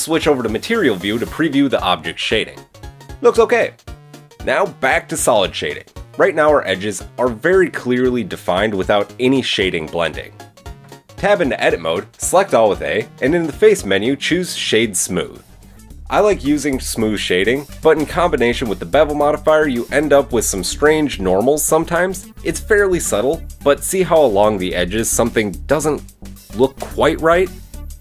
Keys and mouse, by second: 2.2 click, 2.4-5.0 shift+middle drag, 5.4-11.1 middle drag, 11.1 Tab, 13.2 a, 13.7-15.0 right drag, 15.3 Tab, 19.2-28.0 drag.